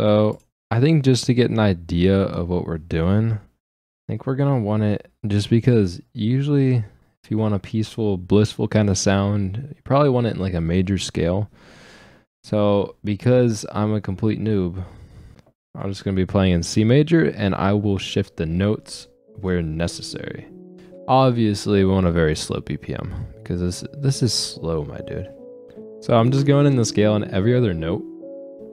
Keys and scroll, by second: 20.8 9, 25.7 space.